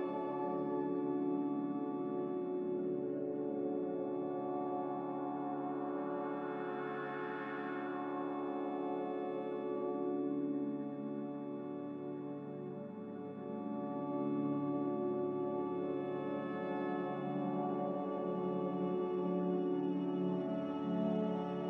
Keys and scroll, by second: 1.7 Escape, 8.1-9.5 typing, 15.2 g, 17.8 z.